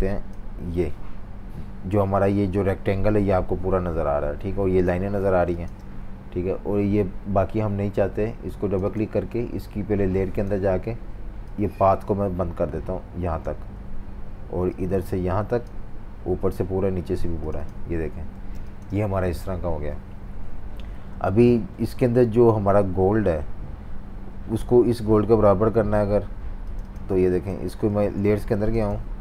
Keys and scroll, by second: 5.3 typing, 18.4 typing, 27.9 super+z.